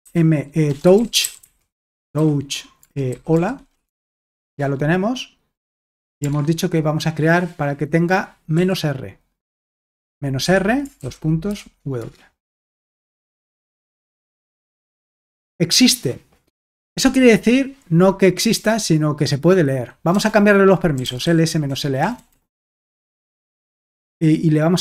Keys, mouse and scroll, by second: 0.0-4.5 typing, 6.4 alt+Tab, 8.5 r, 10.4 Escape, 10.8-12.0 typing, 12.9 alt+Tab, 13.8 ctrl+p, 14.2 ctrl+p, 14.7 Return, 18.5 typing, 20.1-23.9 typing.